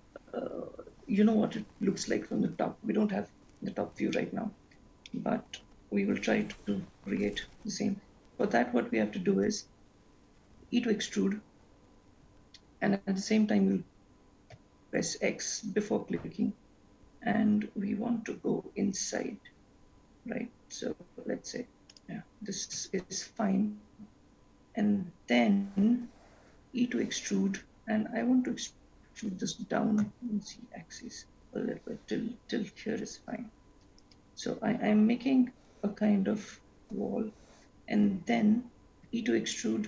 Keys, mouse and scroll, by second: 4.3 shift+middle click, 5.3 middle click, 6.4-7.5 scroll down 1, 8.2-9.1 scroll up 1, 10.9 e, 24.6 scroll up 1, 25.3-27.1 scroll up 1, 27.1 e, 39.0 e.